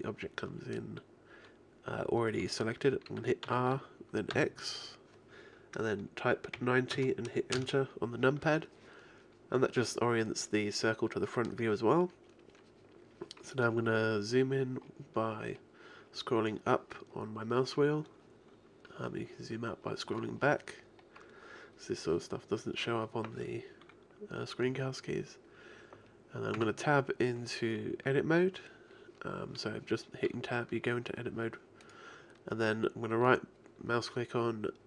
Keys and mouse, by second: 3.5 r, 15.4-19.0 middle drag, 20.2-23.8 middle drag, 26.6 Tab, 31.9-33.7 right drag.